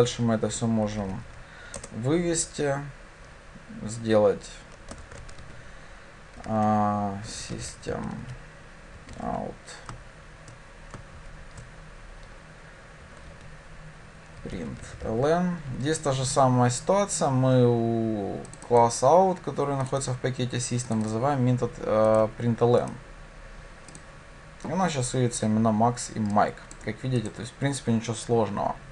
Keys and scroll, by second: 1.8 Return, 15.9 Escape, 24.1 ctrl+shift+F10.